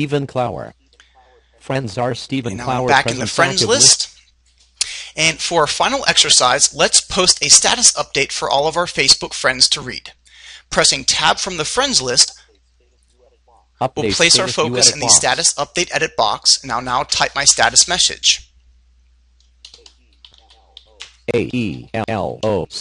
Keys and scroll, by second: 11.2 Tab.